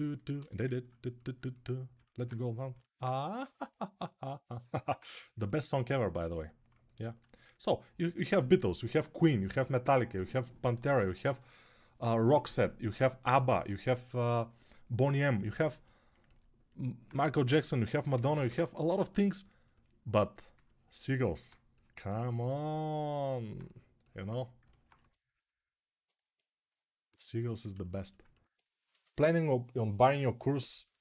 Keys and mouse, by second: 0.1 g, 17.4 3, 17.9 [, 18.1 [, 24.7 1.